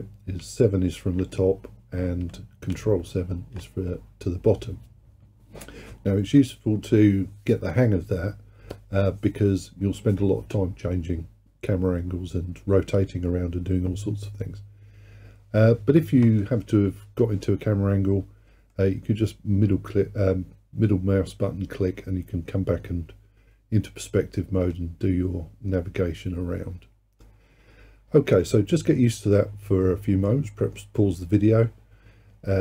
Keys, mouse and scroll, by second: 0.4 KP_7, 2.8 ctrl+KP_7, 18.8-21.8 middle drag, 29.4-32.4 middle drag.